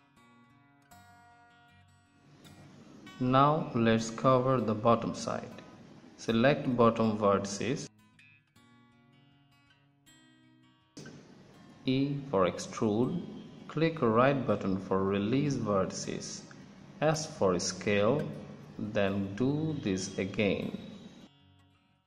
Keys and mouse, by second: 0.7-1.7 middle drag, 3.2 KP_1, 5.2-6.6 drag, 7.5 right click, 8.8 right click, 10.2 middle click, 11.9 e, 15.9 s, 18.1 e, 18.8 s, 20.9 s.